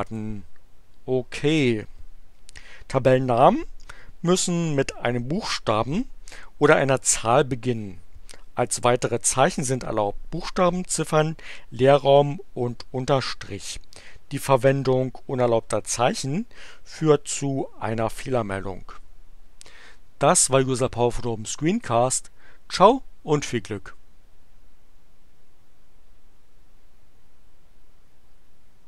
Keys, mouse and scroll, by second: 0.0 click, 20.6 click, 21.7 click.